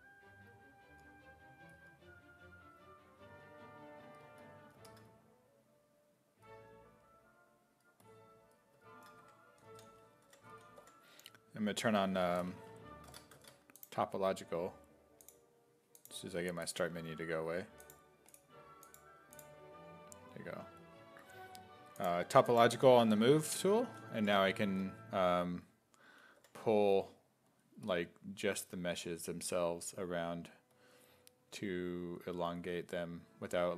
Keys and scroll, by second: 9.2-11.3 typing, 13.2 Tab, 22.8 5, 23.8 s, 24.2 5, 26.4 5.